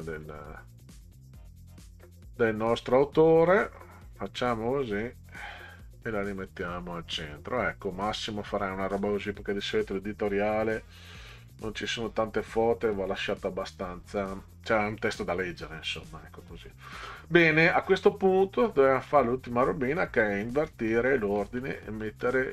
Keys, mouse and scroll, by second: 3.4 click, 5.5 click, 6.4 click, 9.0-10.4 scroll down 10, 13.4-14.1 scroll up 4, 15.0 scroll up 2, 17.0 scroll up 2, 18.7 middle click, 20.7 middle click, 21.4 middle click, 22.0 middle click.